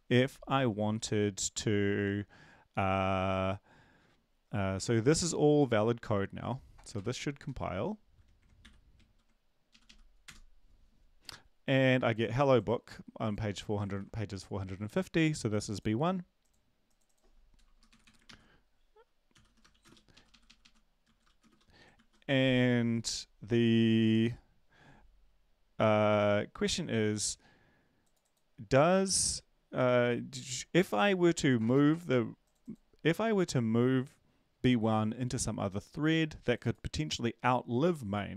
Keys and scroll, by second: 0.5 Tab, 7.5 ctrl+`, 7.5 BackSpace, 7.5 ctrl+1, 8.6 q, 9.1 ctrl+l, 9.7 Up, 9.8 Up, 10.2 Return, 13.9 ctrl+`, 17.9 Delete, 18.0 Delete, 18.2 ctrl+s, 19.6-21.5 typing, 20.4 Up, 21.9 ctrl+s.